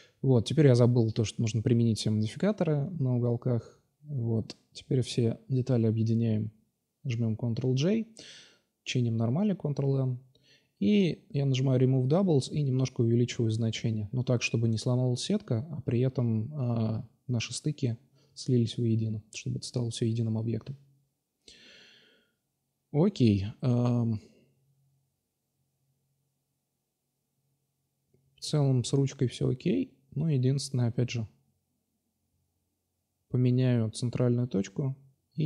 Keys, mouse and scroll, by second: 2.9 drag, 3.9-4.8 drag, 4.9-7.4 drag, 6.3 ctrl+j, 6.5 middle click, 7.4 Tab, 7.5 middle click, 7.9 a, 8.0 a, 8.4 ctrl+n, 9.5 w, 12.3-13.0 drag, 15.5 middle click, 16.1 middle click, 16.6-16.9 middle drag, 17.1-17.6 middle drag, 18.3 Tab, 22.1-24.2 middle drag, 24.9 middle click, 25.5-26.0 middle drag, 27.2 shift+c, 28.1-28.6 drag, 28.6 right click, 28.9 x, 29.6-30.7 right drag, 33.5-34.4 drag, 34.1 right click, 34.4-35.4 middle drag.